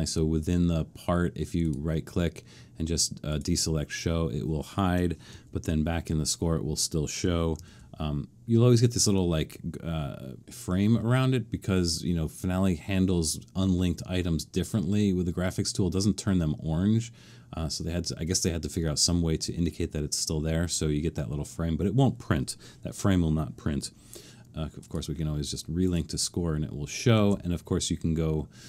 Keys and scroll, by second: 5.3 alt+super+/, 7.5 alt+super+/, 27.2 alt+super+..